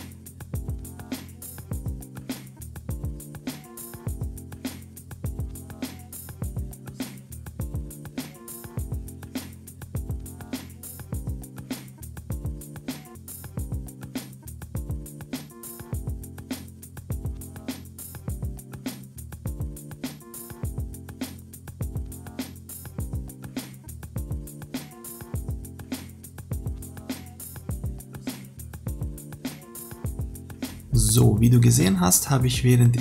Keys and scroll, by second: 0.8 ctrl+-.